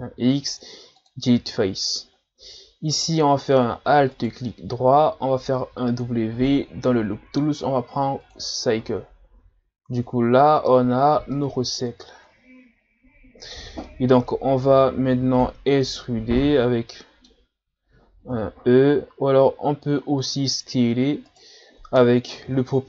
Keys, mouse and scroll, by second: 4.1 alt+right click, 5.7 w, 9.6 scroll down 1, 9.9 Tab, 11.4 middle click, 11.9 Tab, 13.6 scroll down 2, 13.9 middle click, 14.4-14.8 scroll down 1, 14.8-15.1 scroll up 2, 15.8-18.3 middle drag, 18.3 KP_1, 19.4 s, 21.6 scroll up 2, 22.4 o.